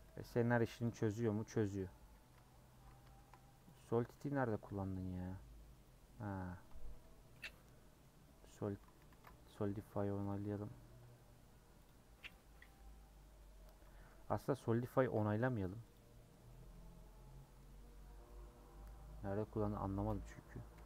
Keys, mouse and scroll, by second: 0.0 middle click, 0.8 Left, 1.6 KP_Decimal, 2.3 Tab, 2.7 Tab, 3.1 shift+middle click, 3.6 click, 4.4-6.9 middle drag, 6.9 Tab, 7.3-8.4 middle drag, 8.4-11.0 drag, 11.0 Tab, 12.3 click, 12.6 Tab, 12.8-14.3 middle drag, 14.3 ctrl+z, 14.7 ctrl+z, 15.9 click, 16.3-17.7 middle drag, 17.7 Tab, 18.2-20.7 middle drag, 20.7 /.